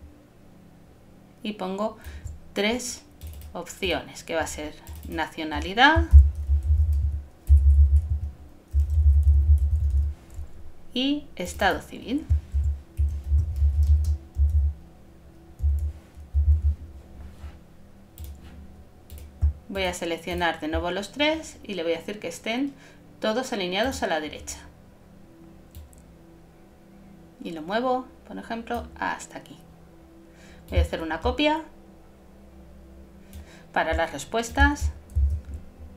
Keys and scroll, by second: 6.1 shift+n, 6.5 shift+c, 12.5 shift+e, 35.2 alt+shift+super+z.